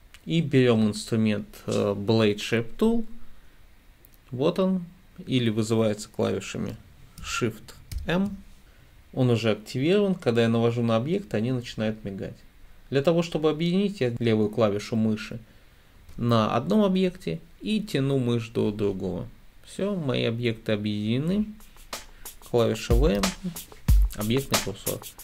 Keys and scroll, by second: 8.0 m, 23.2 v.